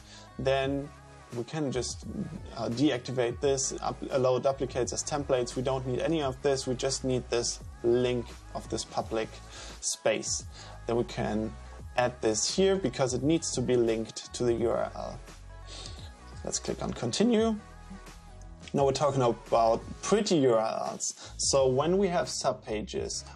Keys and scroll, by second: 12.9 super+v.